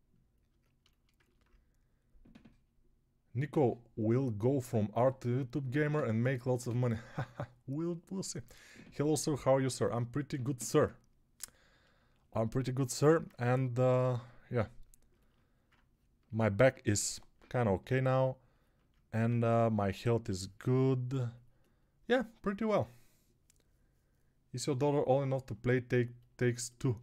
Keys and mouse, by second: 13.3 1, 19.1 2.